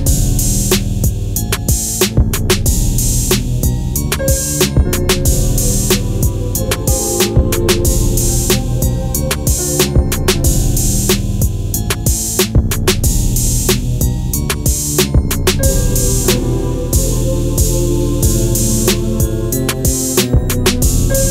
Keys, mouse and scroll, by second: 11.4-13.2 scroll down 1, 13.2 click, 14.9-15.2 scroll up 1, 16.3-21.0 drag.